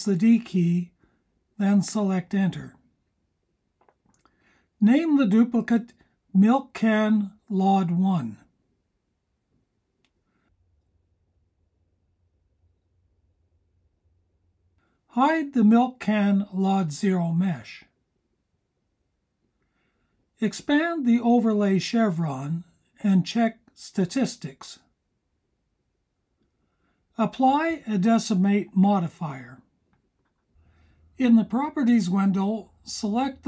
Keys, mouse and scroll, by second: 3.1 shift+d, 7.0 click, 7.2-13.0 drag, 9.5 BackSpace, 16.3 click, 20.0-27.0 drag, 27.4 click, 31.6 click.